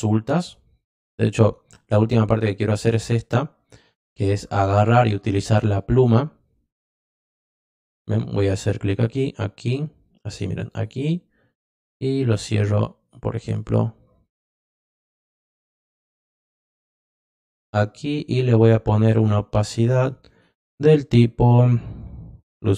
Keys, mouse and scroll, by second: 5.5 click, 7.4 click, 8.8 click, 10.7 click, 16.8 click, 19.0 click, 20.2 click, 22.4 click.